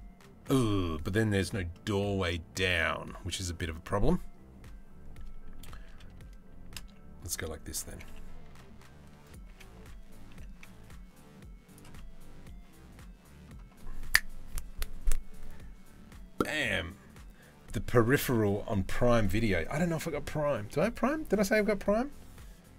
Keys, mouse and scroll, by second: 1.3-2.4 drag, 5.2 r, 7.5 g, 9.1 g, 11.6-13.1 middle drag.